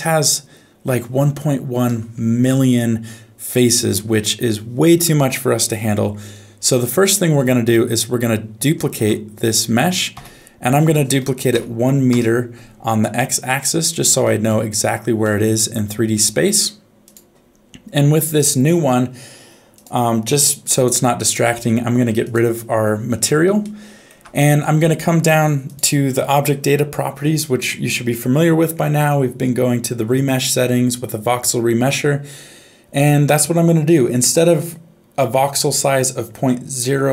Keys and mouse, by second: 2.7 Tab, 4.0 ctrl+s, 6.9 shift+middle click, 7.8 middle click, 9.3 shift+d, 13.0 middle click, 14.2 shift+middle click, 15.2 middle click, 17.0 click, 23.6 shift+middle click.